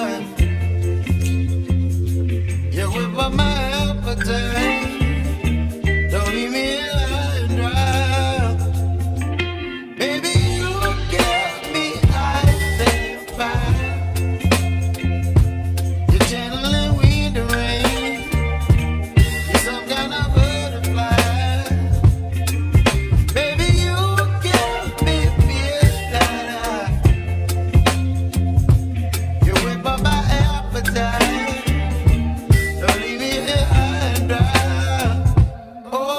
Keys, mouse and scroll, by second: 0.0 right click, 0.9 scroll down 1, 1.0-2.5 middle drag, 2.5 click, 3.3-5.0 middle drag, 5.0 1, 5.5 click, 7.1 m, 7.9-8.3 scroll down 1, 8.3 shift+middle click, 9.2 click, 9.8 m, 10.3 m, 10.7-12.2 middle drag, 12.2 /, 13.3 a, 28.7 alt+e, 30.3 alt+e.